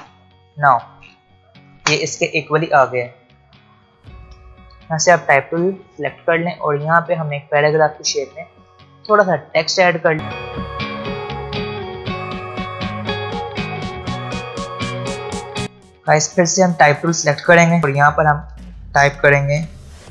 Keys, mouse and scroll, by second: 4.7 t, 5.6 click, 10.2 click, 10.3 alt+scroll up 1, 10.4 click, 10.9 click, 11.4 click, 11.4-12.3 typing, 11.8 click, 12.3 ctrl+z, 12.4 click, 12.6 scroll down 1, 12.8 click, 12.9 shift+Left, 13.1 ctrl+z, 13.2 click, 13.3 shift+Left, 13.6-14.2 alt+scroll up 3, 13.7 click, 13.8 shift+Down, 13.8 click, 14.2 scroll down 2, 14.3 click, 14.7 click, 14.9 Right, 15.2 alt+scroll up 1, 15.4 alt+scroll down 1, 15.6 click, 15.6 space, 16.4 alt+scroll up 1, 17.8 click, 19.9 shift+Num_Lock, 19.9 click.